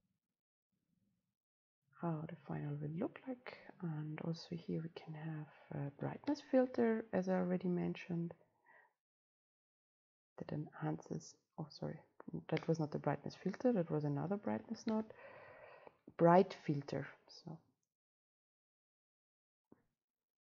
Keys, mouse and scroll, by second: 0.4-5.5 drag, 8.7-11.7 drag, 11.7 right click, 12.5 click, 12.9 Delete, 14.2-20.2 drag, 14.2-16.0 scroll up 2, 16.0-17.2 scroll up 1, 17.2-20.1 scroll up 1, 20.1 scroll up 1.